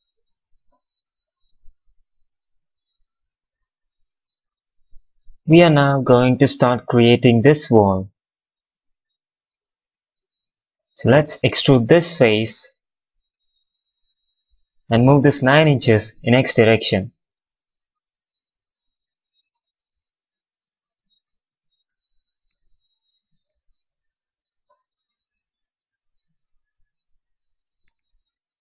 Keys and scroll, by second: 13.4 w, 16.3 x, 22.4 space, 27.7 space.